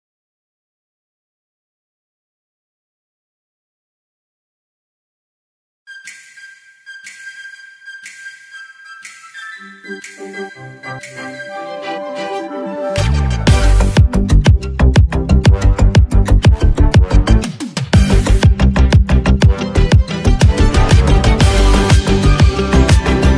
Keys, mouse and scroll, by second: 8.5 ctrl+s, 14.9 click, 17.3 ctrl+alt+shift+e, 22.7 click.